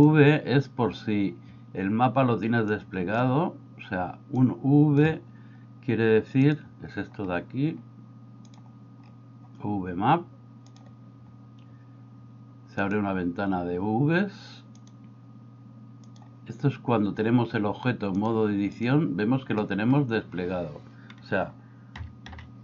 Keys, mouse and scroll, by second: 2.7 click, 4.3 click, 6.4 drag, 10.7 click, 12.9 click, 14.8-16.2 drag, 18.3 click, 22.1 a, 22.3 a.